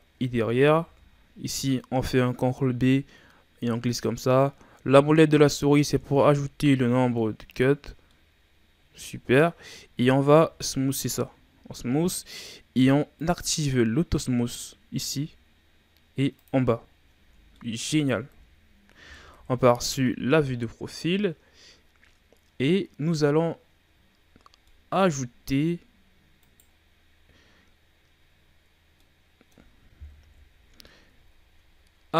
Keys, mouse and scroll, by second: 0.8 ctrl+b, 6.0 Tab, 6.3 scroll down 2, 6.6-7.4 middle drag, 7.4-8.0 scroll up 2, 8.0-10.3 middle drag, 10.3 w, 13.1 click, 15.4-16.3 scroll down 4, 16.3 click, 16.8-17.1 scroll down 5, 17.1 a, 17.5 middle click, 18.2 KP_1, 19.3 KP_3, 22.6-24.0 scroll up 2, 24.0-24.6 shift+scroll down 4, 24.6-25.3 middle drag, 25.3-26.4 scroll up 2, 26.4 right click, 28.9-30.2 middle drag, 30.2 ctrl+KP_1, 31.3-32.1 shift+scroll up 7.